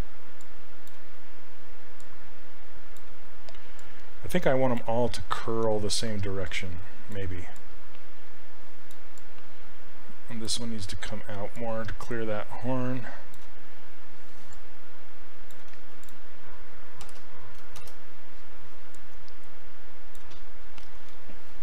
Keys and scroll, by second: 17.1 ctrl+w, 17.8 shift+f.